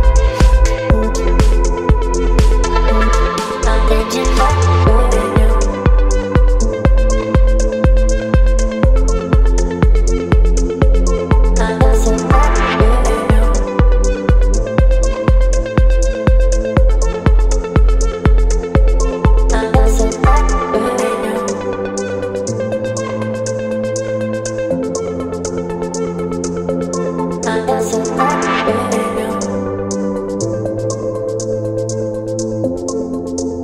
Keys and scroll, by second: 10.8 ctrl+BackSpace, 11.7 ctrl+d, 12.6 ctrl+t, 19.6 Return, 22.9 space, 27.7 Delete, 29.8 space, 30.9 v.